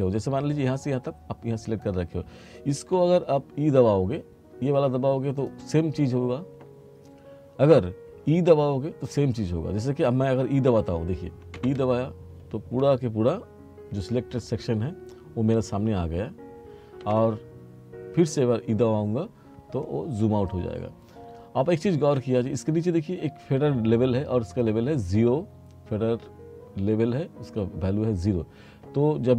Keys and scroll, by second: 7.7 e, 11.6 e, 17.1 e.